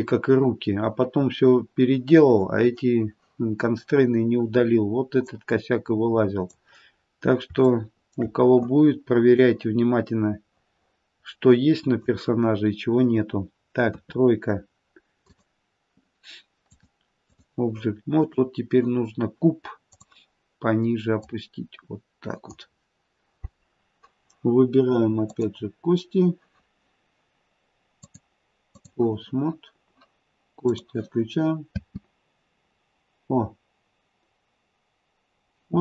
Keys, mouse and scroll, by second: 5.2 click, 7.0-7.7 scroll down 2, 7.7 shift+middle click, 9.4 click, 12.3-13.8 scroll down 2, 13.8 KP_3, 15.2 click, 16.6 click, 25.2 click, 28.0 click, 30.7 click, 31.7 space.